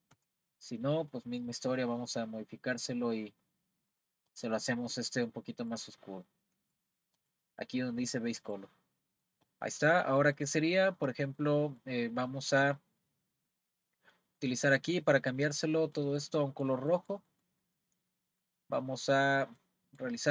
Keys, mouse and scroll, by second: 0.1 a, 1.4 click, 3.9 click, 4.3 click, 8.4 click, 9.0-20.3 middle drag.